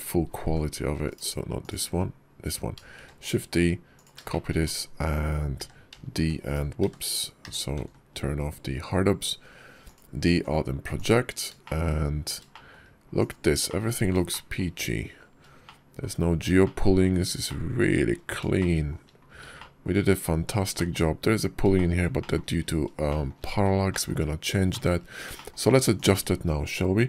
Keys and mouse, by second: 0.3 g, 1.4 click, 2.8 shift+d, 4.2 shift+click, 5.4 d, 6.6 w, 10.0 alt+d, 11.5 shift+middle click, 12.4 shift+middle click, 13.0 click, 13.5 middle click, 14.2 shift+middle drag, 15.5-15.9 shift+middle drag, 16.5 middle click, 17.3-17.7 shift+middle drag, 18.4 shift+middle click, 19.4 shift+click, 20.6 shift+click, 21.6 shift+click, 22.0 shift+click, 22.9 shift+drag, 23.7 shift+click, 23.9 shift+middle click, 24.5 shift+middle click, 24.5 shift+click, 24.7 shift+middle click, 25.1 shift+middle click, 25.2 shift+click, 25.3 shift+middle click, 25.8 click.